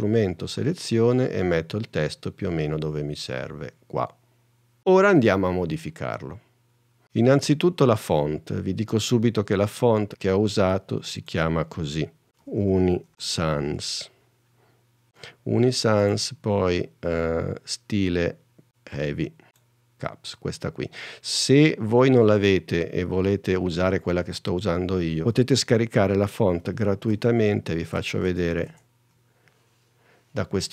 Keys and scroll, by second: 29.5 super+n.